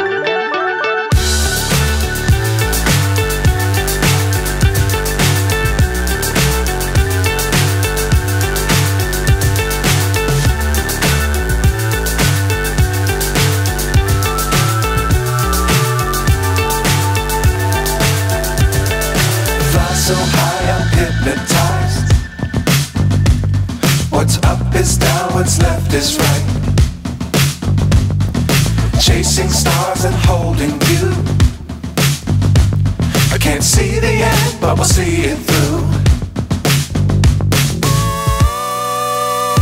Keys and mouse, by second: 2.5 click, 9.3 click, 10.1 KP_0, 15.2 click, 16.9-18.0 drag, 22.0-24.0 drag, 28.8 click, 30.1 click, 31.2 click, 35.9 click, 37.6-39.6 drag.